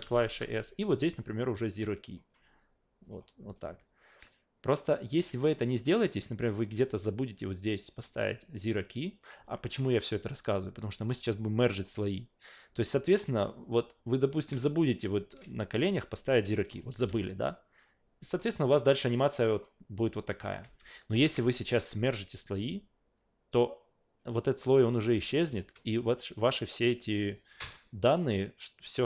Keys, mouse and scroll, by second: 0.0-0.2 typing, 0.4-1.4 drag, 1.8 click, 3.0 click, 4.2-6.6 drag, 7.2 click, 7.9 a, 14.2 click, 14.7 shift+click, 15.6 click, 15.9 a, 16.7 click, 17.0 Delete, 18.4-19.6 drag, 20.1 alt+click, 20.6 alt+v, 21.1 alt+v, 21.5 shift+click, 24.5 click.